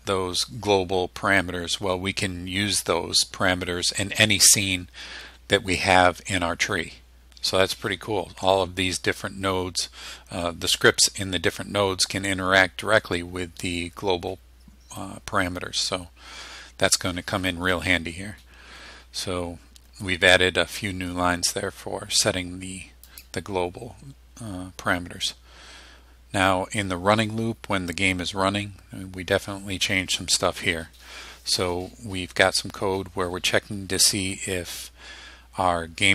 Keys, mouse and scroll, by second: 22.1-22.8 scroll down 2, 23.1 click, 23.5-23.8 scroll down 1.